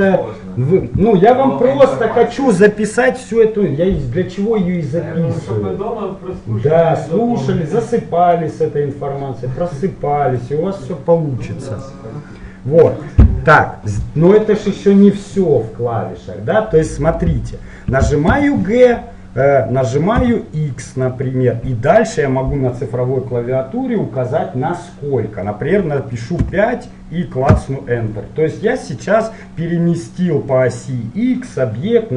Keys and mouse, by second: 13.6-15.4 middle drag, 16.6-18.4 middle drag, 18.5 g, 28.8-30.7 middle drag.